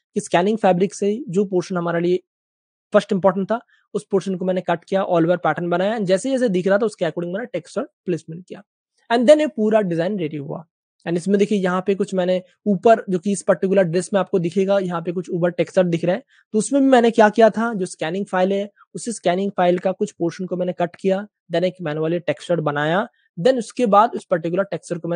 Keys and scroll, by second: 9.0 space, 9.1 space, 9.2 space, 9.7 super+space, 10.8 space, 12.7 space, 14.5 space, 16.1 typing.